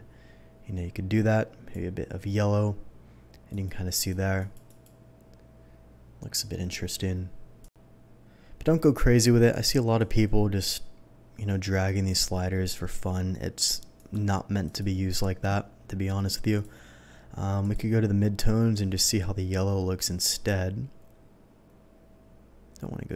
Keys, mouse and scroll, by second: 3.5 click, 3.9 click, 4.4 click, 4.7 click, 7.6 click, 9.4 click, 10.0-13.0 drag, 13.9 click, 14.6 click, 16.5 click, 17.6 click, 18.7 click.